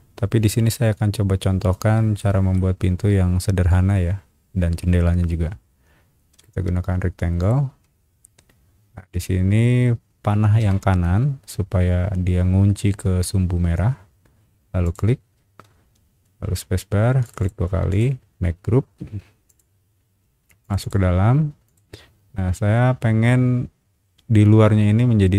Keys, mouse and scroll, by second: 1.2 scroll up 1, 2.2 shift+middle click, 4.0 scroll up 1, 6.3 r, 7.4 click, 8.4 scroll up 1, 14.8 click, 15.7 space, 17.2 click, 17.4 click, 17.9-18.9 right drag, 19.5 click, 20.6 click, 20.8 click, 21.6 click, 22.0 scroll down 1.